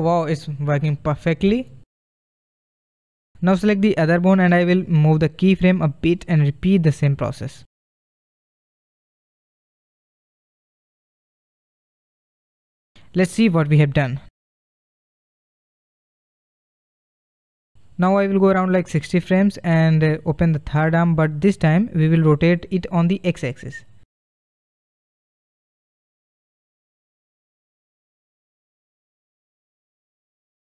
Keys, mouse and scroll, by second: 0.8-7.2 drag, 7.2 r, 12.7-14.2 drag, 14.2 space, 15.0 space, 15.3 space, 16.4 space, 17.5-20.7 drag, 21.7-22.9 middle drag, 22.9 click, 23.8-24.5 drag, 25.5 r.